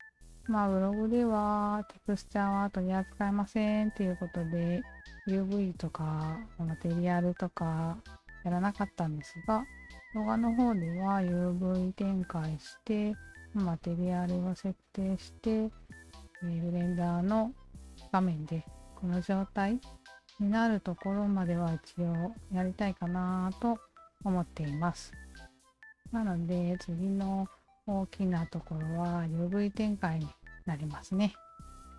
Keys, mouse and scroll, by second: 6.3-10.2 alt+drag, 15.3 alt+click, 16.7 alt+click, 18.8 alt+click, 20.0 alt+click, 20.4 alt+click, 20.8 alt+click, 21.1 alt+click, 21.5 click, 21.9 click, 22.3 click, 22.7 click, 23.6-24.6 alt+drag, 26.6 alt+click, 27.2 alt+click, 28.2-31.5 alt+drag, 31.7 alt+drag.